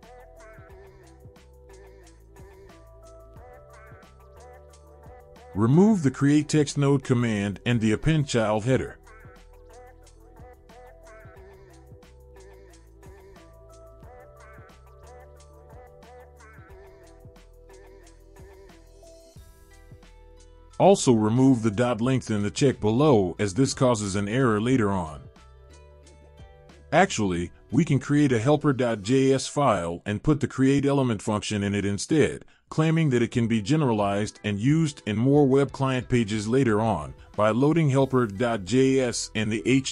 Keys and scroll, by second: 2.9 ,, 3.1 space, 3.6 ctrl+v, 8.7 BackSpace, 9.0 BackSpace, 10.5 Delete, 12.1 Delete, 12.3 Delete, 12.5 Delete, 19.7 Delete, 24.5 Delete, 26.2 ctrl+s, 36.9 ctrl+c, 38.1 ctrl+x.